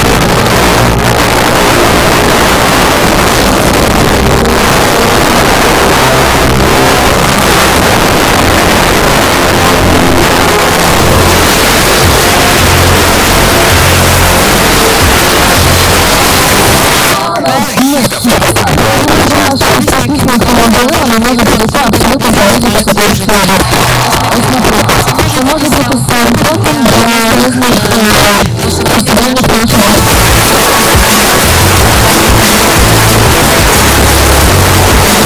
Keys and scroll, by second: 16.7 Page_Down.